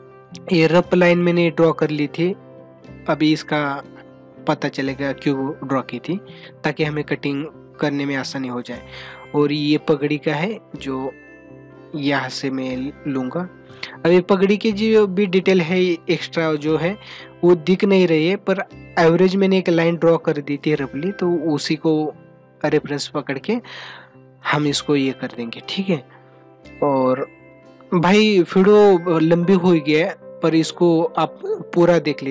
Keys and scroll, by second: 4.6 ctrl+=, 16.4 space, 29.2 space.